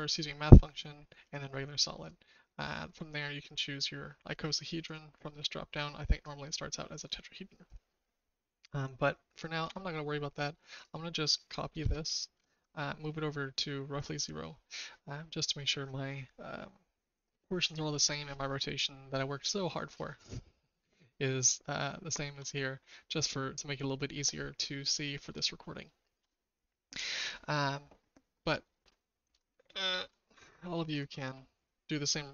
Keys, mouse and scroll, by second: 4.8-6.2 drag, 7.0 click, 9.6 Delete, 10.7 click, 11.8 shift+d, 13.9 typing, 20.6-22.3 shift+middle drag, 24.9 middle click, 25.8 shift+middle click, 28.8 shift+middle click, 29.2 shift+click, 29.8 shift+middle click, 30.0 shift+click.